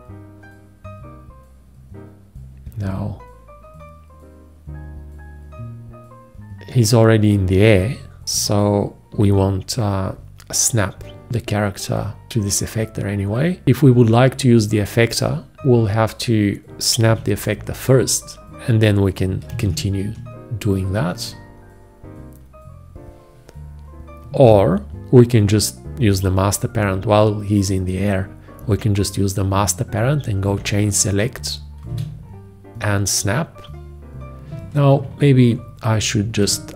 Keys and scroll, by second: 19.7 ctrl+`, 36.5 ctrl+z.